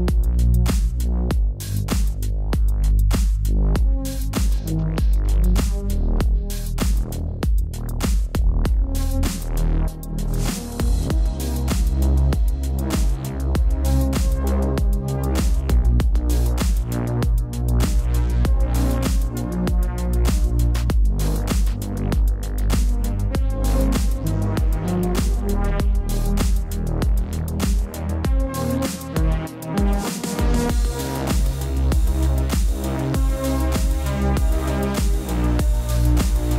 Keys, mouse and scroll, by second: 0.4 click, 6.1-7.2 typing, 7.2 click, 7.4 click, 8.9-9.6 typing, 9.6 click, 10.9 space, 11.0 click, 11.0 space, 11.3 v, 12.4 click, 15.8 typing, 19.9 click, 21.3 click, 24.4 click, 28.7 click.